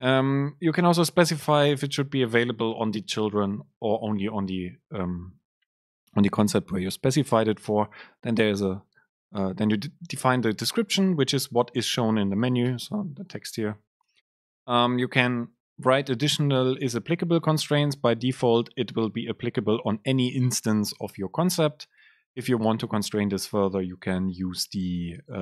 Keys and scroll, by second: 14.2 Down.